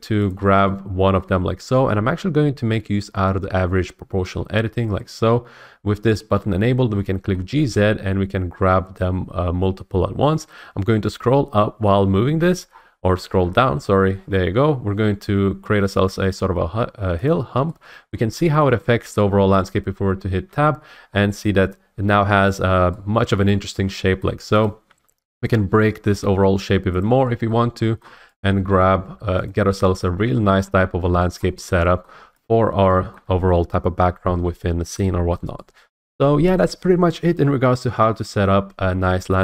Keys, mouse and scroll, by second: 0.3 click, 1.1-3.3 middle drag, 5.0 click, 7.3 middle click, 7.5 scroll, 7.5 g, 11.8-12.7 scroll, 12.7-14.0 scroll, 14.2-16.3 scroll, 16.3-17.1 scroll, 17.3 click, 18.1 middle click, 18.6 shift+middle click, 19.5 middle click, 20.4 Tab, 21.1 middle click, 22.6 middle click, 23.5 middle click, 24.2 shift+middle click, 24.6 click, 24.8 Tab, 25.4 click, 26.0 g, 27.0 click, 27.5 middle click, 28.0 shift+middle click, 28.4 click, 28.5 g, 29.5 click, 29.6 Tab, 30.0 middle click, 30.2-30.9 scroll, 32.0 scroll, 32.4 click, 33.1 middle click, 35.4-38.1 shift+middle drag.